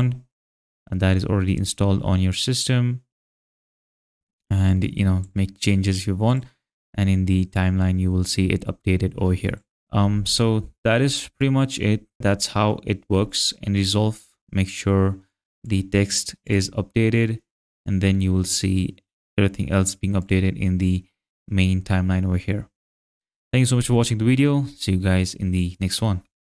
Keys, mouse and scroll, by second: 0.0 click, 2.3 click, 4.7 click, 6.3 click, 7.5 click, 15.6 click, 20.2 click.